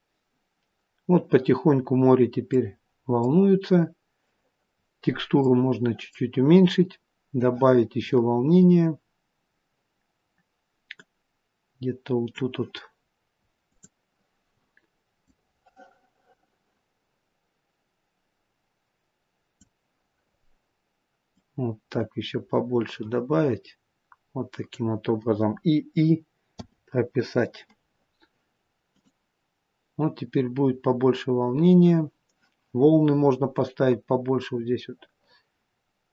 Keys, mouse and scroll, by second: 1.9 scroll up 1, 2.4 middle click, 4.7 scroll down 2, 5.3 middle click, 6.9 scroll up 1, 10.9 click, 13.6 click, 21.2 click, 28.8 click.